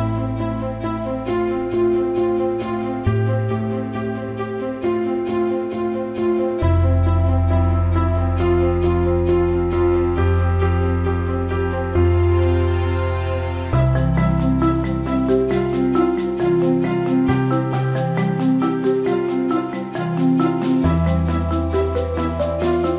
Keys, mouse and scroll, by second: 1.5 click, 2.6 click, 2.8-5.5 drag, 5.7 alt+middle drag, 6.4 click, 6.8 alt+middle click, 7.2 alt+shift+middle click, 8.3-10.1 alt+middle drag, 12.4 click, 13.8 alt+shift+middle click, 15.1 alt+middle click, 17.6 Tab, 19.3 click.